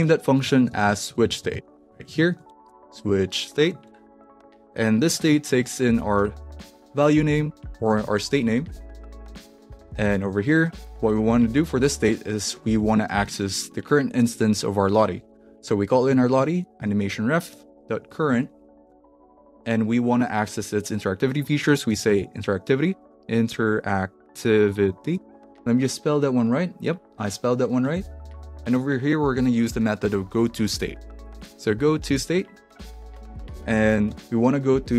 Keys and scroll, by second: 0.0-10.0 typing, 10.2 Return, 10.6 Down, 11.3 ;, 12.7 Tab, 14.9-19.7 typing, 21.3-25.7 typing, 27.9 shift+/, 28.7 ., 31.1-34.1 typing.